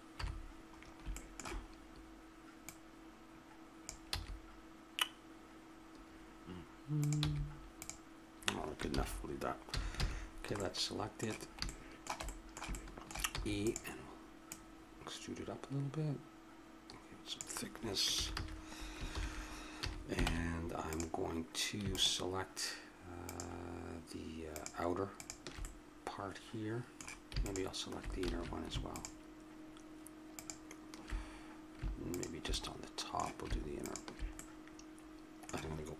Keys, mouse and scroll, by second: 0.1 KP_7, 2.6-3.6 middle drag, 3.6 click, 4.1 a, 7.0 right click, 7.2 g, 7.8 click, 8.9 ctrl+z, 9.7 a, 10.0 a, 10.3-12.1 middle drag, 13.3 e, 14.4-16.3 drag, 16.3 middle click, 18.1 a, 18.3 a, 19.1 ctrl+n, 19.8 a, 20.3 ctrl+Tab, 25.6-27.0 middle drag, 28.2 ctrl+z, 32.5-35.2 middle drag, 35.2 click.